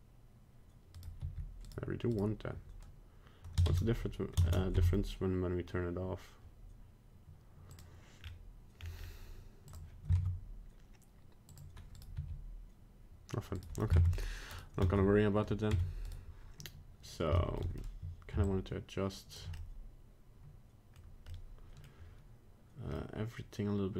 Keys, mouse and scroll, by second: 1.2 g, 2.1 right click, 3.7 ctrl+Tab, 4.4 ctrl+Tab, 7.7 click, 8.2-8.6 scroll down 2, 8.8-9.7 scroll down 2, 8.9-9.7 scroll up 1, 9.7 click, 9.7-10.0 scroll up 1, 10.1 ctrl+Tab, 12.0 right click, 12.2 r, 14.0 ctrl+Tab, 14.5 right click, 14.9 ctrl+Tab, 15.8 Tab, 16.0 right click, 17.4 shift+middle click, 18.4 shift+click, 19.5 middle click, 20.9 middle click, 21.3 middle click, 22.9 middle click.